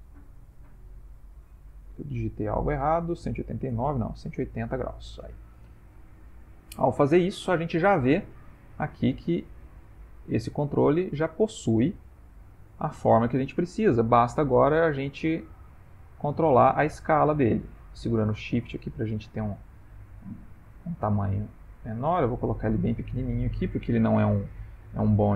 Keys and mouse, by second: 5.7 middle click, 6.5 ctrl+middle click, 6.9 middle click, 7.7 ctrl+middle click, 8.1 middle click, 8.3 middle click, 8.6 middle click, 8.8 Tab, 9.3 ctrl+middle click, 9.9 click, 10.9 shift+middle click, 11.6 ctrl+middle click, 12.1 ctrl+middle click, 13.0 middle click, 15.0 click, 22.9 middle click.